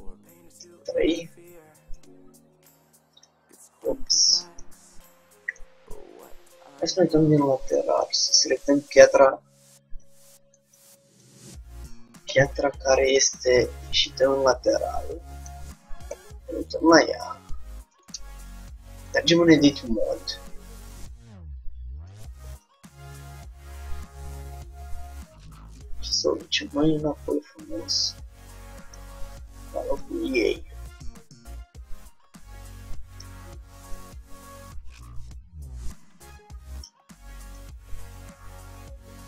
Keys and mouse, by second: 0.6 KP_3, 2.1-3.9 drag, 3.7 ctrl+z, 6.7 KP_1, 8.0-10.5 drag, 10.1 a, 10.3 a, 10.7 a, 11.3-13.0 drag, 12.3 KP_3, 13.9-16.2 middle drag, 16.2 KP_1, 18.3 Tab, 18.3 middle click, 19.1-20.7 drag, 22.1-23.8 drag, 34.0-36.5 drag, 37.6-39.2 drag.